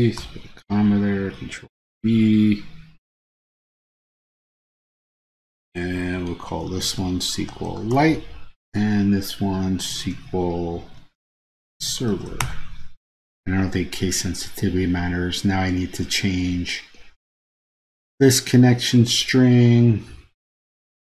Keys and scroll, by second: 1.3 super+v.